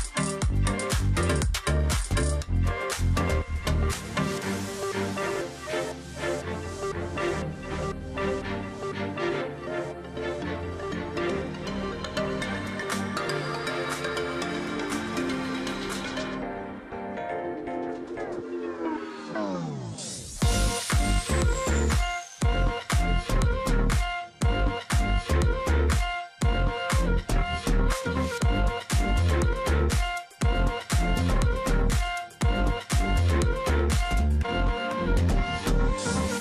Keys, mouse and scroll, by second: 0.1 ctrl+click, 0.5-1.0 alt+scroll up 1, 1.7 space, 4.0 ctrl+click, 4.1-4.5 alt+scroll down 1, 4.5 space, 5.2-5.8 alt+scroll up 1, 6.4 alt+scroll up 1, 6.6 space, 7.3-8.0 alt+scroll up 1, 8.3-8.8 alt+scroll up 1, 11.1 alt+scroll up 1, 11.3 ctrl+z, 12.0 space, 13.4 ctrl+z, 15.1 ctrl+click, 16.1-16.8 alt+scroll down 1, 16.8 alt+scroll up 1, 18.1 double click, 19.5 ctrl+click, 19.6 alt+scroll down 1, 19.9 space, 20.3 alt+scroll up 1, 20.7 space, 21.3 space, 21.5-22.0 alt+scroll up 1, 22.2 double click, 22.4 space, 23.0 ctrl+z, 24.9 space, 26.4-26.7 alt+scroll down 1, 27.4 alt+scroll up 1, 29.4 space, 30.8 space, 32.3 space, 34.5 ctrl+click, 35.3 ctrl+shift+click, 36.2 alt+click.